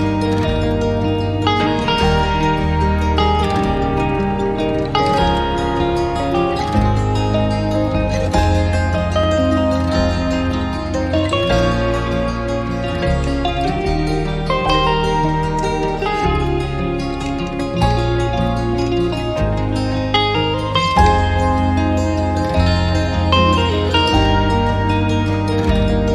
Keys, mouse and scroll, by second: 2.9 alt+click, 3.5 scroll down 1, 3.7 scroll up 1, 3.9 alt+click, 4.3 alt+middle click, 4.6 scroll down 1, 4.7 scroll up 1, 4.9 alt+middle click, 6.0 scroll down 1, 6.5 alt+click, 6.8 scroll up 1, 14.8 alt+click, 15.9 alt+middle click, 16.4 alt+click, 17.5-17.8 scroll down 1, 17.8 alt+click, 18.6 alt+click.